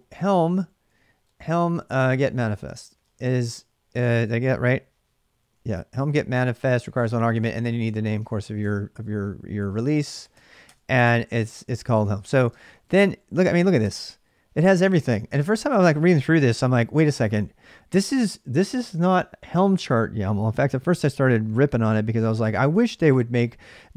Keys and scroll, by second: 0.0-4.6 typing, 5.4 ctrl+a, 6.4-13.3 typing, 13.6 Return.